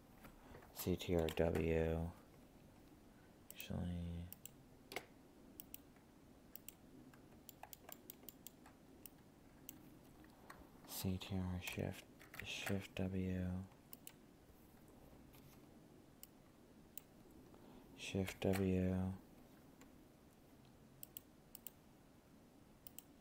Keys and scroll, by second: 18.3 ctrl+w.